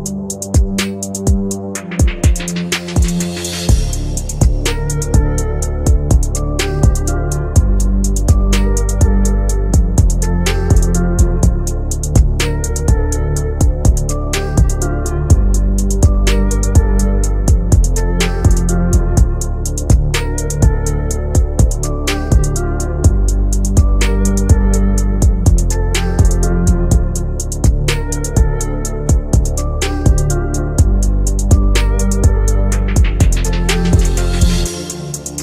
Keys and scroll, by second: 15.5 c.